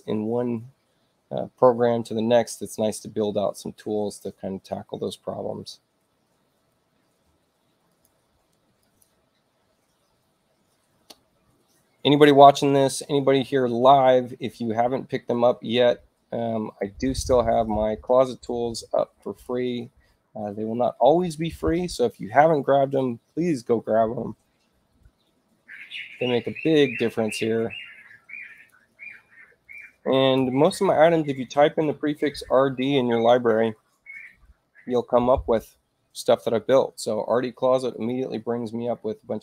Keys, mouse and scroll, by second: 7.9 click, 8.8 click, 15.7 space, 16.6 space, 17.1 click, 19.2 ctrl+click, 28.5 click, 29.7-31.8 typing, 37.9 click.